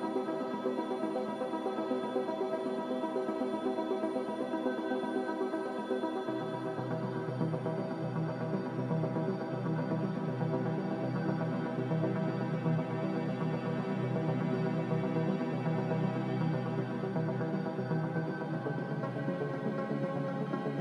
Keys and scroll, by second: 0.0 ctrl+j, 2.1 a, 11.4 b, 12.5 Delete, 14.7 n.